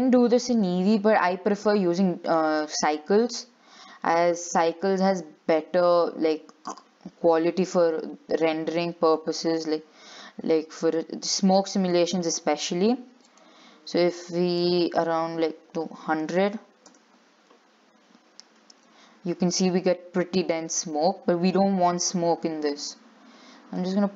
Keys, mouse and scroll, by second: 2.0-3.3 middle drag, 3.3 scroll up 2, 6.6 click, 11.6-15.9 shift+middle drag, 15.9 click, 18.0 click, 18.1 0.